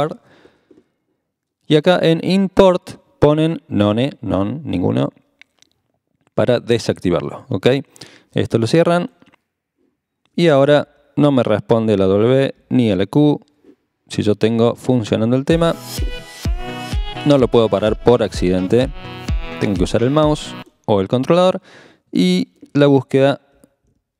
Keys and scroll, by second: 10.9 w, 12.6 typing, 16.6 w, 17.0 q, 23.4-24.1 typing.